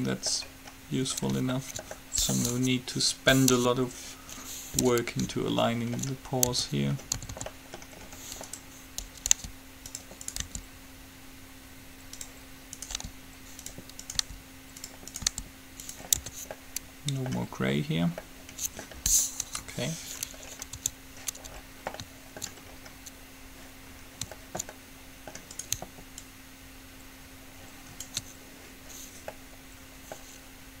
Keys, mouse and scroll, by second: 3.7 KP_3, 5.1 KP_5, 6.7 Tab, 7.4 a, 7.6 a, 8.6-12.2 right drag, 9.5 g, 10.6 g, 13.1-17.2 right drag, 13.1 g, 14.3 g, 15.1-17.2 drag, 15.4 g, 16.6 Tab, 16.8 middle click, 19.6 KP_3, 21.0 Tab, 25.4 middle click, 25.8-27.6 right drag, 26.4-28.1 drag, 29.6 middle click.